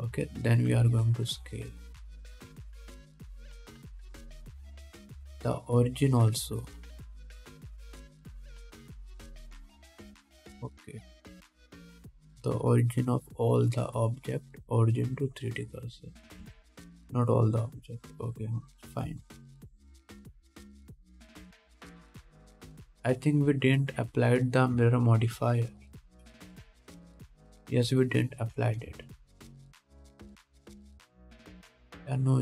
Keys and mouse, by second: 1.9 s, 3.8 KP_1, 6.0-8.0 shift+drag, 17.7 ctrl+z, 18.2-18.8 drag, 19.0-21.4 middle drag, 20.3 s, 21.4-27.6 drag, 21.6 s, 22.2 g, 27.6-28.1 middle drag, 28.1-29.8 drag, 29.8 middle click, 29.9-32.4 shift+drag, 31.5 ctrl+s.